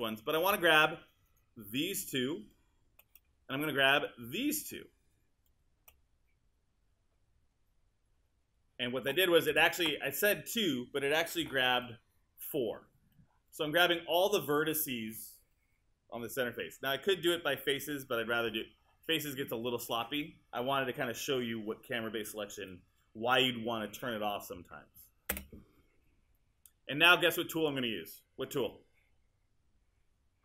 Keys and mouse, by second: 0.8 shift+click, 9.5 space, 25.3 space.